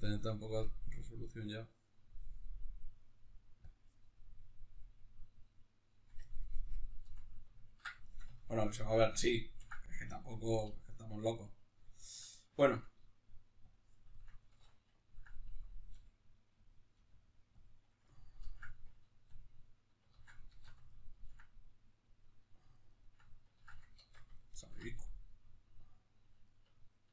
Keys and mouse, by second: 4.0-6.0 drag, 6.0-13.5 ctrl+middle drag, 13.5 click, 13.9-17.0 ctrl+middle drag, 14.3 alt+q, 15.7 f, 17.3 click, 17.9-21.7 ctrl+middle drag, 19.9 ctrl+z, 20.3 alt+q, 21.7 click, 22.2-25.2 ctrl+middle drag, 23.3 ctrl+z, 23.9 alt+q, 25.2-26.2 drag, 26.2-27.1 ctrl+middle drag.